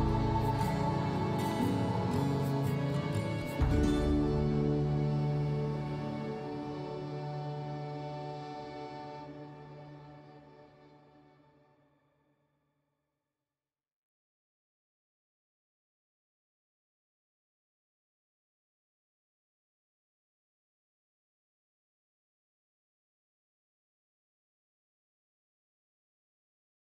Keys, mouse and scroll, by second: 5.0 scroll up 4, 5.3-5.7 scroll down 2, 8.0 middle click, 8.7 middle click, 9.2 middle click, 10.0-11.1 middle drag, 11.1-18.1 drag, 18.3 middle click, 18.9 middle click, 22.8-24.7 drag, 24.7 middle click, 25.3-26.6 middle drag, 26.6-26.9 drag.